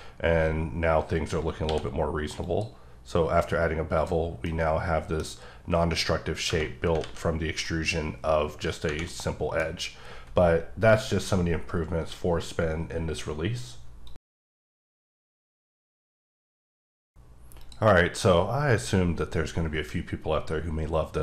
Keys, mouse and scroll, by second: 0.0-1.6 scroll up 2, 2.4 click, 3.8 scroll up 3, 3.9 click, 4.2 scroll down 2, 4.4 middle click, 5.4-6.3 scroll up 1, 6.3 scroll down 1, 7.0 alt+z, 9.1 middle click, 9.6-11.8 scroll down 1.